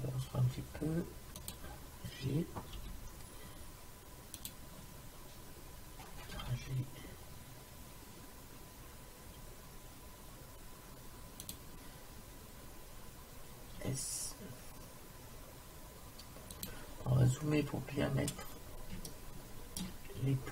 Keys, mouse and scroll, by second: 2.8 g, 6.4 g, 13.8 s, 17.1 middle click, 17.9-19.3 middle drag, 19.5 middle click.